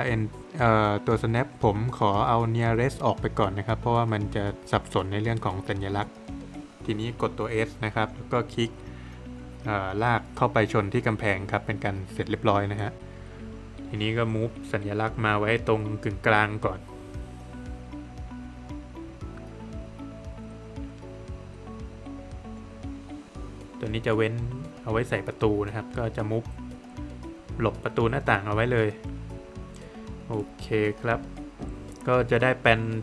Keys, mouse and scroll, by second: 0.5 click, 3.8 click, 4.6 middle click, 4.8 Escape, 6.5 space, 7.0 click, 7.4 double click, 7.7 space, 9.1 click, 9.3 scroll up 1, 10.5 click, 10.8 scroll down 1, 11.0 middle click, 11.7 click, 12.2 double click, 12.6 middle click, 13.2 space, 13.7 click, 14.6 scroll down 1, 14.8 middle click, 15.5 click, 16.5 middle click, 16.6 scroll up 1, 16.8 space, 17.5 click, 18.5 scroll down 1, 18.6 middle click, 18.9 Escape, 19.3 click, 22.2 space, 22.7 click, 24.3 double click, 24.9 space, 25.4 click, 27.6 click, 27.9 scroll down 1, 28.1 middle click, 28.5 scroll down 1, 28.7 middle click, 29.4-29.8 scroll down 1, 30.0 middle click, 30.7-31.0 scroll down 1.